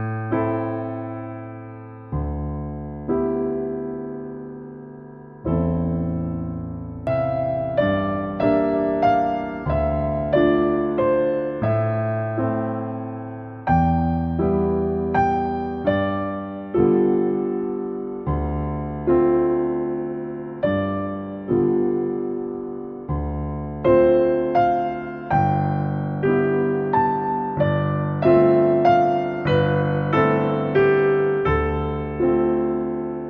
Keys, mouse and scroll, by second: 0.5-1.6 drag, 1.8-3.8 drag, 5.1-6.2 middle drag, 6.2-7.1 scroll up 1, 7.1-9.0 drag, 9.0-10.2 middle drag, 10.2-11.7 drag, 12.4 scroll down 2, 12.5 middle click, 13.0-13.4 scroll up 1, 13.4-14.5 drag, 15.1 middle click, 15.7 s, 16.4 scroll down 5, 16.5 scroll up 1, 16.6 middle click, 16.9 scroll down 1, 17.0-18.1 shift+middle drag, 18.1 g, 18.6 middle click, 18.7 scroll up 1, 18.8 shift+middle click, 19.1 shift+a, 21.7-23.0 drag, 23.0 scroll up 2, 23.3-25.8 middle drag, 25.8 click, 26.5 ctrl+z, 27.3 shift+a, 29.2 click, 29.9 Delete, 30.1 scroll down 2, 30.2 middle click, 31.0 click, 31.3 shift+middle click, 31.9-32.3 scroll up 2, 32.4 middle click, 32.8 g.